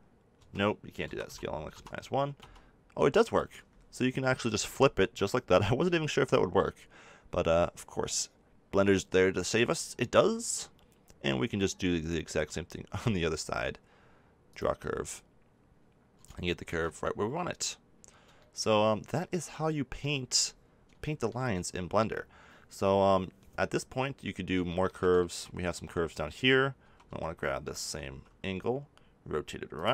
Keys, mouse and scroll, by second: 1.0 s, 5.8 g, 13.0-16.3 drag, 16.3 middle click, 16.5 middle click, 20.4-26.8 middle drag, 26.8 a, 27.0-28.2 drag, 27.0 a, 27.8 r, 29.8 click.